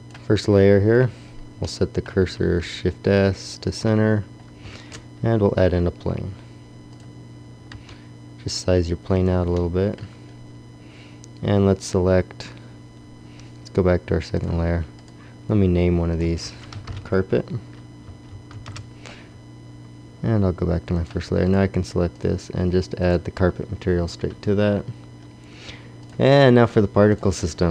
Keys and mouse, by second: 1.1 click, 2.3 shift+s, 4.6 shift+a, 7.6 shift+a, 7.7 s, 9.0 click, 12.8-14.4 middle drag, 14.4-17.9 drag, 17.9-20.8 middle drag, 20.9 click, 23.9-27.7 drag.